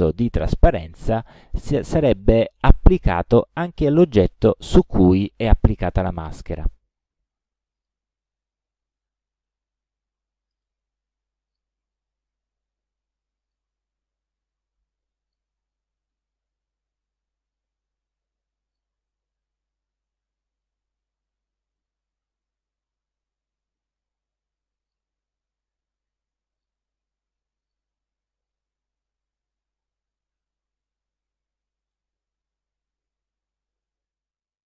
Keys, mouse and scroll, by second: 7.8 shift+click, 10.5 click, 11.5 click, 13.5 click, 14.5-15.5 drag, 17.1-19.0 drag, 20.6-25.1 drag, 26.5 click, 27.7 click, 28.5 click, 29.6 ctrl+scroll down 1, 30.4-32.1 ctrl+drag.